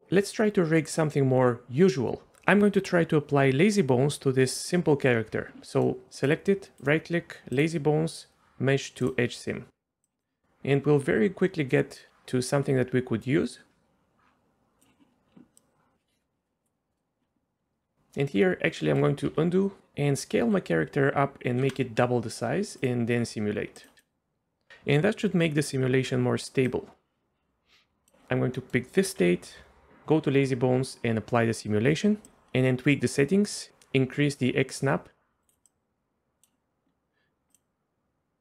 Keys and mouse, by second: 5.7 middle click, 6.8-10.3 right drag, 12.1-14.8 drag, 12.1 space, 15.6 click, 16.2-17.0 middle drag, 18.1 middle click, 18.8 ctrl+z, 19.2 ctrl+z, 19.8 Escape, 20.4 s, 21.5 KP_2, 21.6 KP_Enter, 22.9-24.5 middle drag, 22.9-24.5 right drag, 24.7 space, 26.7-28.1 drag, 28.5 middle click, 29.2 n, 34.8 click, 35.7 click.